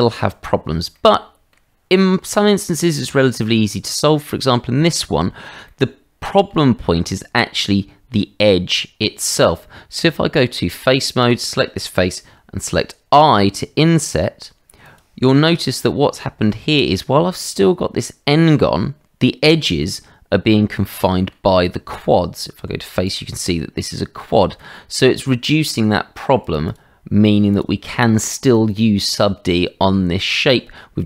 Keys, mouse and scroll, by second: 0.9 middle click, 2.8 shift+middle click, 3.7 middle click, 5.6 middle click, 10.0 Tab, 11.2 click, 12.8 i, 15.9 middle click, 19.0 middle click, 20.9 middle click, 21.9 Tab, 23.1 click, 23.7 middle click, 24.5 shift+middle click, 26.4 click, 26.6 click, 27.5 click, 29.2 shift+middle click, 29.8 middle click.